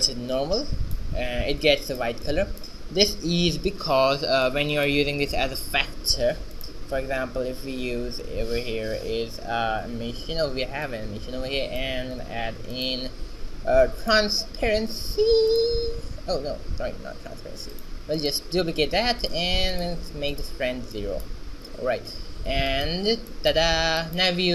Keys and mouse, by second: 1.8 shift+z, 1.9 middle click, 3.7 shift+z, 4.6-6.5 drag, 5.5 shift+a, 11.0-12.7 drag, 12.4 shift+d, 13.0 shift+s, 17.7 x, 17.8 click, 18.3-20.1 right drag, 18.8 shift+d, 22.8 click, 24.1 click, 24.1 right click.